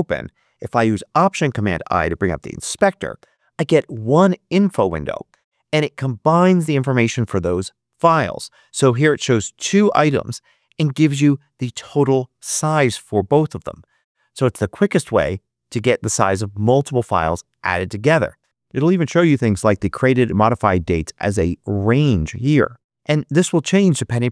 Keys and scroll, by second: 2.6 alt+super+i.